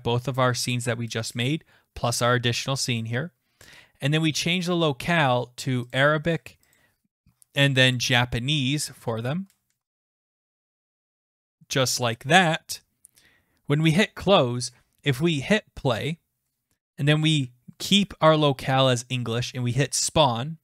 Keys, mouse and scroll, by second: 4.4 click, 5.9 click, 6.8 click, 7.4-9.0 scroll down 33, 9.3 scroll, 9.5-10.5 scroll down 22, 10.5 scroll up 3, 10.9 scroll down 2, 11.1 scroll, 11.8 click, 13.9 click, 15.6 click, 18.3 click, 20.1 click.